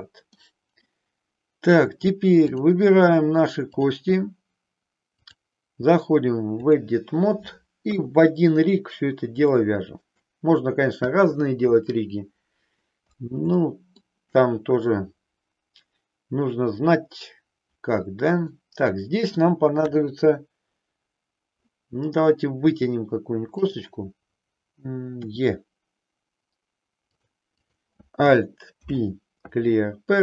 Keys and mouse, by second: 3.8 click, 5.2-6.9 drag, 7.8 KP_3, 9.5 shift+middle click, 13.6 shift+middle click, 18.5-19.5 middle drag, 19.9 KP_3, 23.5 click, 25.2 e, 27.1 click, 27.6 click, 28.8 alt+p.